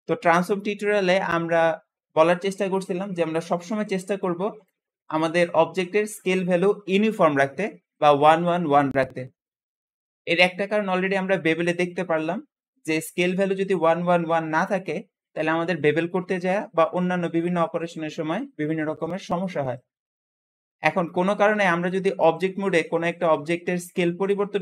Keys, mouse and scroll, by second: 10.7 Escape, 14.2-14.7 middle drag, 14.7-17.5 scroll up 1, 17.5 scroll up 1, 20.5-21.4 scroll down 1, 21.4 s, 21.7 x, 24.5 click.